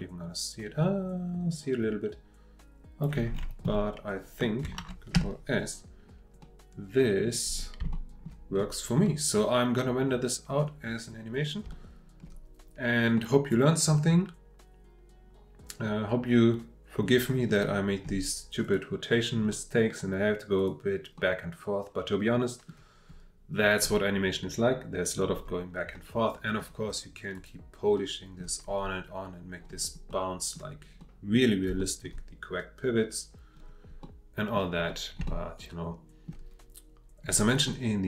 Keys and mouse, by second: 4.8 ctrl+s, 6.4-7.2 drag, 7.9-8.2 shift+middle drag, 9.0-10.4 drag, 11.7-13.0 shift+middle drag, 13.1-17.5 middle drag, 20.6 click, 21.2-22.7 middle drag, 25.9-26.6 drag, 27.3 click, 28.0-28.4 middle drag, 30.1-30.5 middle drag, 31.0-31.3 middle drag, 31.8-32.1 shift+middle drag, 34.0-34.6 drag, 35.3-36.3 shift+middle drag, 37.7-38.0 drag.